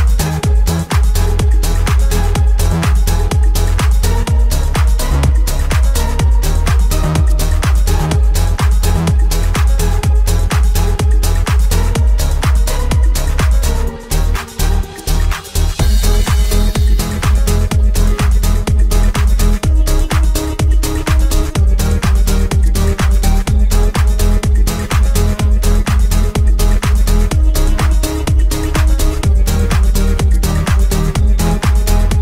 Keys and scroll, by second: 9.9 7, 21.8 6, 24.9 9, 25.2 Return.